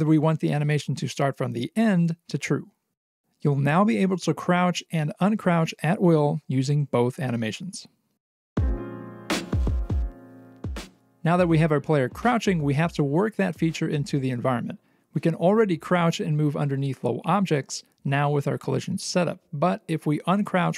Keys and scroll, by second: 0.0-1.1 typing, 2.8 ctrl+s, 6.3 c, 10.9-11.6 typing, 17.0-17.9 typing, 19.1 c.